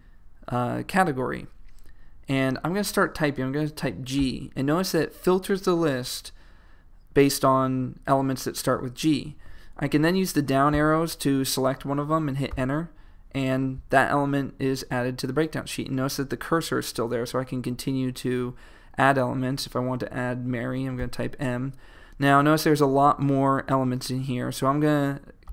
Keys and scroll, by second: 10.8 Down, 12.7 Return, 22.8 m.